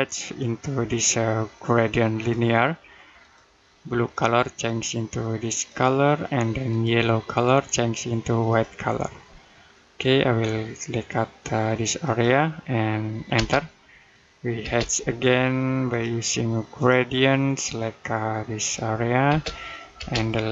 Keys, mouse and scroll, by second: 10.2-11.9 scroll up 1, 11.9 click, 13.2 space, 15.7 click, 19.1 space.